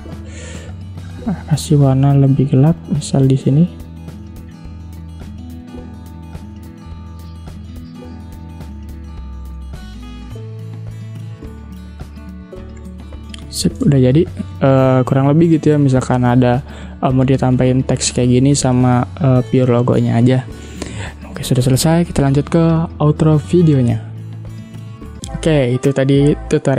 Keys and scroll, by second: 0.4 v, 9.7 v, 12.8 ctrl+0, 13.9 space.